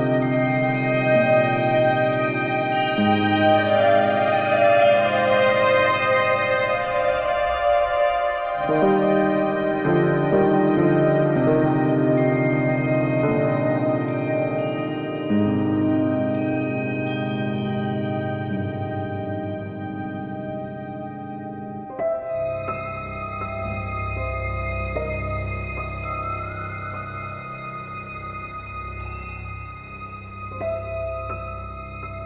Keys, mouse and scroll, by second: 0.0 scroll, 0.2 click, 0.8 ctrl+c, 2.3 click, 2.6 scroll, 2.9 middle click, 3.5 shift+click, 4.2 middle click, 4.3-4.6 scroll, 4.8 click, 5.4 click, 8.0-9.3 drag, 9.4-10.6 middle drag, 11.7-12.5 alt+scroll, 13.5 alt+scroll, 15.1-15.8 alt+scroll, 16.2 alt+scroll, 16.3 click, 17.3 alt+middle click, 17.4 middle click, 18.1 middle click, 19.2 middle click, 19.3 middle click, 19.9 middle click, 20.7 middle click, 21.4 click, 22.2 middle click, 22.8 click, 23.4 shift+click, 24.1 q, 25.4 ctrl+k, 26.0 click, 26.2-26.8 scroll up 8, 26.8-27.3 scroll down 10, 27.7 alt+middle click, 27.7 scroll, 28.5 click, 29.7 ctrl+j, 30.1 ctrl+j, 30.7 click.